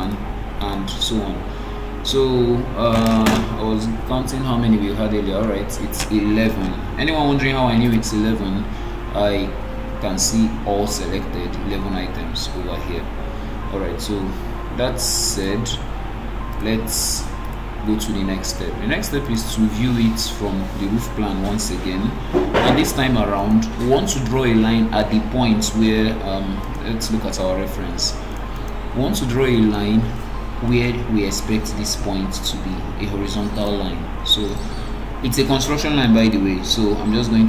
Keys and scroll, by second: 3.9 alt+g, 14.4 alt+g.